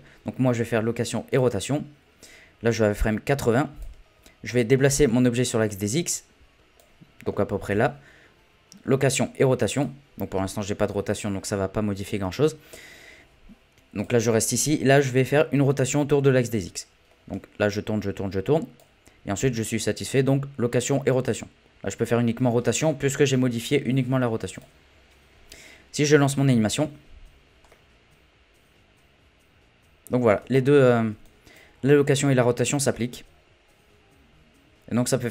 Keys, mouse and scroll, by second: 3.5 click, 4.1-4.8 scroll down 6, 4.8 middle click, 5.1-5.7 scroll up 3, 5.7 click, 7.3-7.7 scroll down 3, 14.0 click, 14.5 scroll down 1, 14.7-16.6 middle drag, 16.6 click, 19.4 i, 26.0 click, 26.5 space, 27.7-30.3 middle drag, 30.3 space, 31.2-32.6 drag, 32.6 space, 32.9-35.3 middle drag.